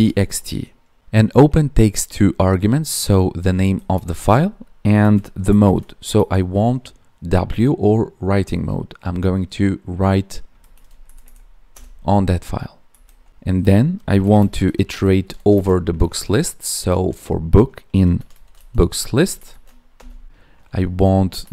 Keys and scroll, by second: 3.5 Right, 3.9 space, 4.1 Left, 4.9 space, 10.7 ctrl+s, 11.0 Right, 12.8 Right, 14.3 space, 15.5 space, 16.7 space, 19.1 Tab.